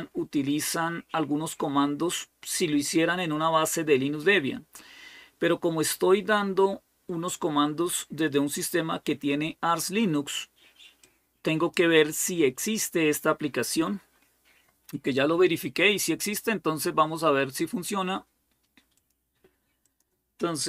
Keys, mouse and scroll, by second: 3.1-3.7 scroll down 1, 10.8-12.9 drag, 18.9-20.5 drag, 20.5-20.6 typing.